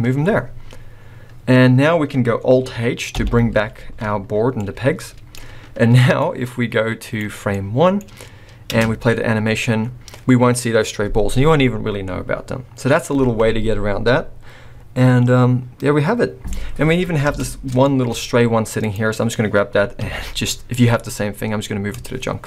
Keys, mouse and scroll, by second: 1.0-2.6 scroll down 1, 2.6 scroll down 1, 3.1 alt+h, 3.8 alt+a, 4.5 middle click, 6.2 click, 7.6 middle click, 8.0-8.7 scroll down 1, 8.7 scroll down 1, 8.7 space, 17.0-17.7 scroll up 4, 17.3 space, 17.8 shift+middle click, 18.1-18.7 scroll up 1, 18.7 click, 18.7 scroll up 1, 20.0 m, 22.3-22.4 scroll down 3.